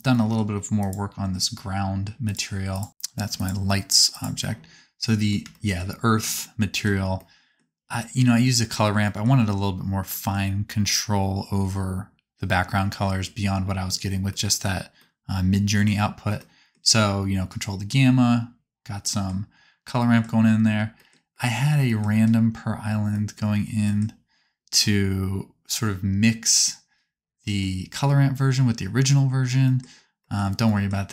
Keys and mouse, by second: 0.8 click, 2.3-3.4 drag, 4.1 click, 4.8-8.3 middle drag.